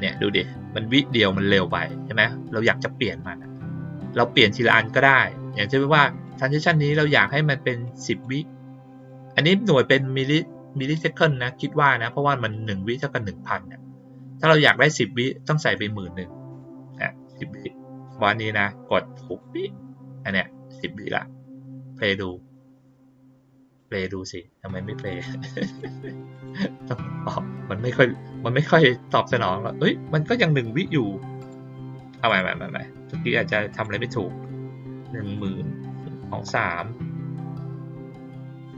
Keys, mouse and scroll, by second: 4.4 click, 6.2 click, 7.8 click, 8.9 click, 19.2 click, 21.9 click, 23.7 click, 24.9 click, 25.6 click, 26.3 click, 31.3 click, 32.2 click, 33.6 click, 38.6 click.